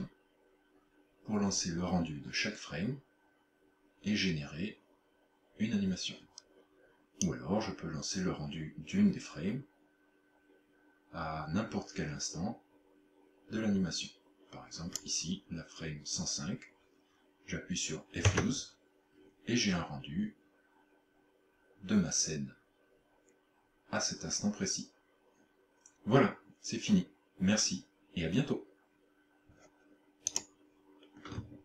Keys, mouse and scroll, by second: 7.3 click.